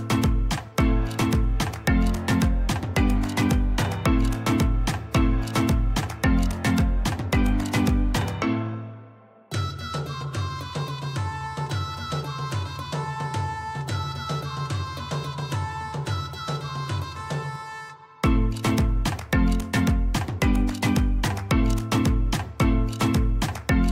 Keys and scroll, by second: 2.4 Delete, 3.7 m, 19.3 Escape.